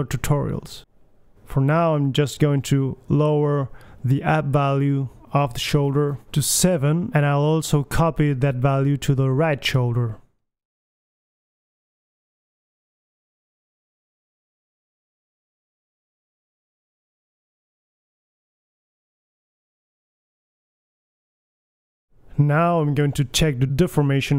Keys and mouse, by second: 0.3 g, 5.0-5.8 middle drag, 5.7 alt+g, 6.8-8.6 drag, 9.8 right drag, 10.0-11.0 middle drag, 11.7 g, 13.1-14.0 drag, 13.8 g, 14.4 middle drag, 16.2-16.8 middle drag, 16.5 g, 17.1-18.2 right drag, 18.0 a, 18.2 alt+g, 18.2 a, 18.3 alt+r, 18.4 alt+s, 18.4 a, 19.2 KP_1, 19.5-20.1 middle drag, 20.5 right click, 21.1 g, 21.9 middle click, 22.0 KP_1, 22.2 middle click, 23.3 g, 23.9-24.2 drag.